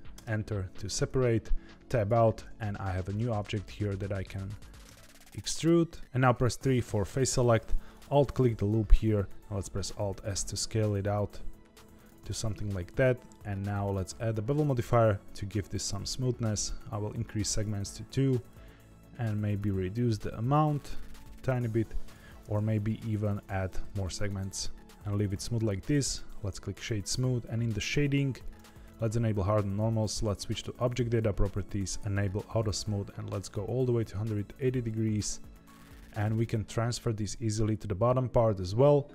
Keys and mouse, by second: 0.7 Tab, 2.9 Tab, 3.6 a, 4.8 e, 6.8 3, 7.9 alt+click, 9.6 alt+s, 12.2 Tab, 13.9 click, 16.4 click, 18.5-22.1 shift+drag, 24.2-25.8 right drag, 27.0 click, 28.4 click, 29.8 click, 31.7 click, 32.7 click.